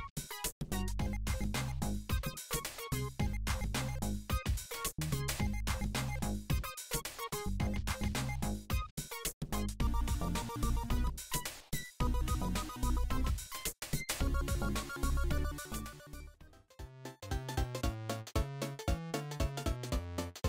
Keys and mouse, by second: 0.0-2.0 typing, 1.6 middle click, 2.1 alt+click, 2.2 ctrl+b, 2.2-3.8 middle drag, 2.9 ctrl+l, 3.0 s, 3.6 Tab, 3.7 Tab, 3.8 click, 3.8 a, 4.0 Tab, 4.2 middle click, 4.4-5.8 drag, 4.9 Tab, 5.2 ctrl+l, 5.8 middle click, 6.0 click, 6.1 Tab, 6.2-7.4 middle drag, 7.4 click, 7.6 Tab, 8.0 Tab, 8.3 middle click, 8.5 click, 8.6 middle click, 9.1 Tab, 9.1 a, 9.2-10.2 drag, 9.3 Tab, 9.8 Tab, 10.2 ctrl+r, 10.4 Tab, 10.4-10.9 middle drag, 10.9 click, 11.0 middle click, 11.1-11.5 drag, 11.5 Tab, 11.5 Tab, 11.8 ctrl+KP_7, 12.4 shift+d, 12.5 g, 13.1 shift+d, 13.2 g, 15.4 Tab, 15.5 Tab, 16.0 ctrl+l, 16.2 ctrl+j, 16.3 Tab, 16.4 a, 16.7 s, 17.3 Tab, 17.4 Tab, 17.5 g, 17.9 right click, 17.9 s, 18.0 Tab, 18.0-18.5 middle drag, 18.5 click, 18.8 middle click, 19.2 click, 19.8 middle click.